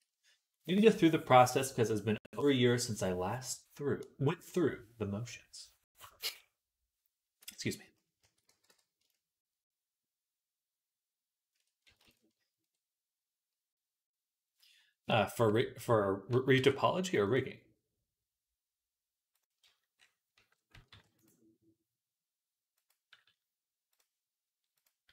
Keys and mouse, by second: 8.0 a, 8.3 x, 11.9 ctrl+z, 16.4 ctrl+r, 19.2 ctrl+r, 20.7 ctrl+r, 23.8 click, 23.8 middle click, 23.8-25.1 right drag.